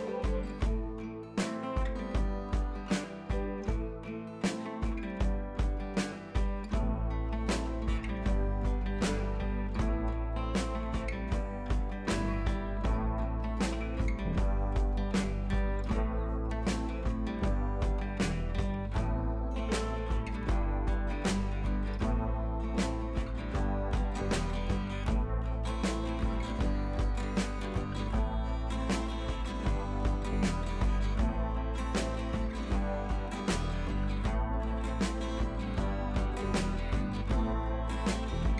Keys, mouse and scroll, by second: 0.0 ctrl+d, 0.2-0.9 scroll down 1, 0.9-1.2 scroll up 1, 1.5 click, 4.1 ctrl+j, 5.1-5.6 drag, 9.1 click, 11.4-11.7 scroll down 1, 11.7 click, 11.9-12.6 scroll up 1, 12.7 ctrl+z, 12.9 click, 13.7-14.7 scroll up 1, 16.1 click, 18.5 b, 18.7-22.6 drag, 20.7-22.6 drag, 22.7-23.6 drag, 23.7-24.1 scroll up 1, 24.2 [, 24.4 [, 24.5 [, 24.6-25.3 click, 25.2-26.1 scroll down 1, 26.1 ], 26.4 ], 26.6 ], 29.0 click, 29.8 scroll up 1, 30.5 right click, 30.8 click, 31.2 scroll up 1, 31.3-32.0 typing, 32.1-33.1 drag, 34.4 scroll down 1, 34.5 space, 34.6-36.1 drag, 36.5 space, 36.6 click, 37.0 space, 37.6 drag.